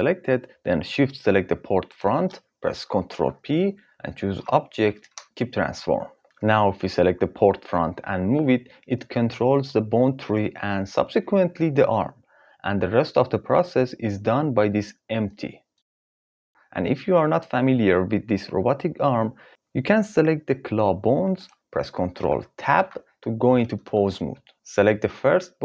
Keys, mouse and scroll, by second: 1.4 shift+click, 2.7 ctrl+p, 6.2 ctrl+z, 7.4 click, 7.4 g, 9.2 g, 12.6 g, 22.3 ctrl+Tab.